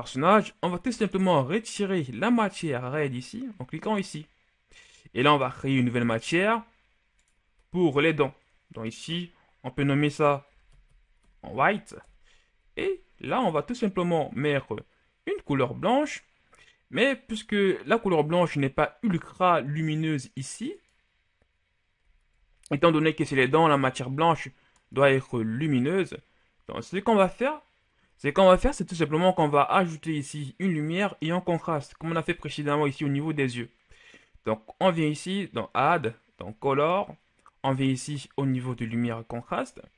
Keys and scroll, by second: 10.4-11.9 typing.